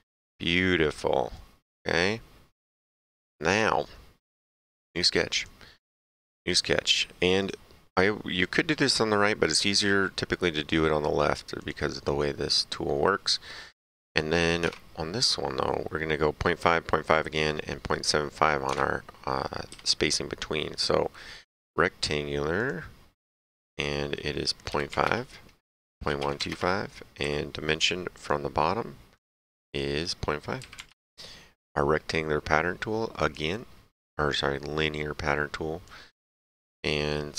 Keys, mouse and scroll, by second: 0.4 middle click, 0.8 right click, 2.0 middle click, 3.1 middle click, 4.8 click, 6.0 s, 7.4 click, 11.5 click, 13.8 middle click, 14.6 alt+Tab, 18.7 alt+Tab, 19.6 s, 21.4 click, 22.5 click, 24.9 KP_5, 25.0 KP_Enter, 25.9-27.2 typing, 26.5 KP_Enter, 28.1 click, 30.7 KP_5, 30.8 KP_Enter, 31.0 Return, 33.1 click, 35.8 click.